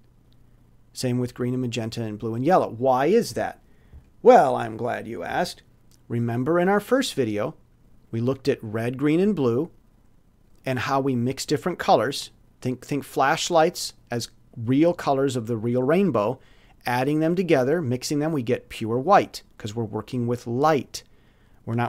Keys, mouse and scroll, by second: 4.9 click, 5.6 alt+click, 6.3 alt+click, 7.2 alt+click, 11.2-11.9 scroll up 4, 12.6 scroll down 2, 19.2-20.0 scroll down 4.